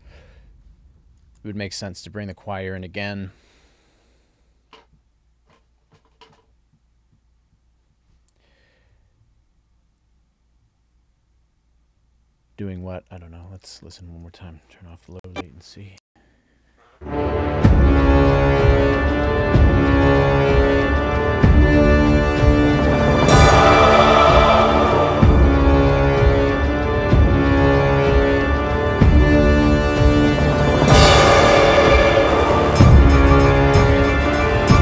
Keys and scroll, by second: 1.4 super+s, 15.0 ctrl+alt+l, 16.1 space.